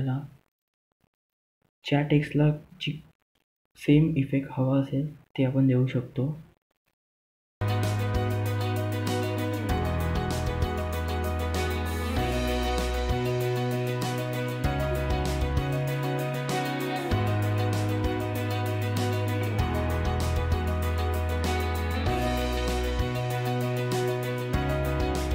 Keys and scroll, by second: 7.1 ctrl+z.